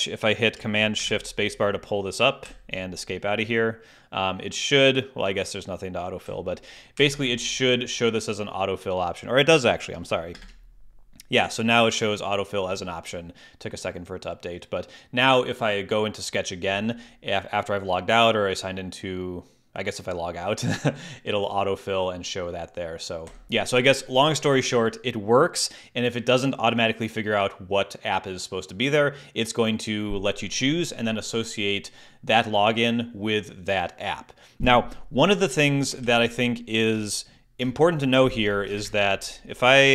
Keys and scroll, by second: 0.9 shift+super+space, 2.4 Escape, 6.2 Escape, 10.3 shift+super+space, 23.2 Escape, 36.0 super+h, 36.9 shift+super+h, 38.7 shift+super+space.